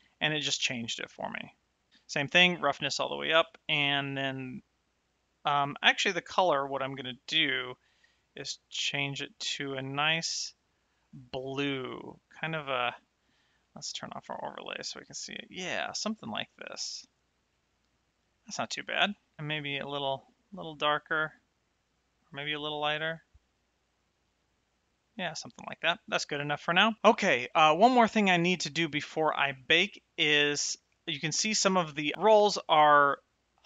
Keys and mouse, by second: 2.2 click, 3.4 click, 8.3 click, 11.8 click, 14.1 click, 16.0 shift+right click, 17.4 middle click, 19.4 click, 29.5 shift+middle click, 31.8 shift+middle click.